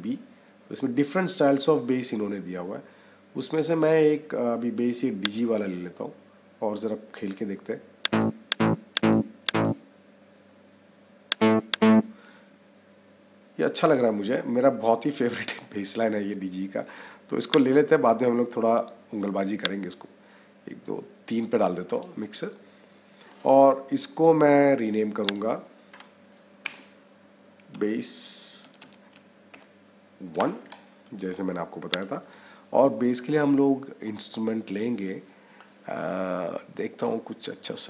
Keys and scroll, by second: 26.5 b, 27.6 a.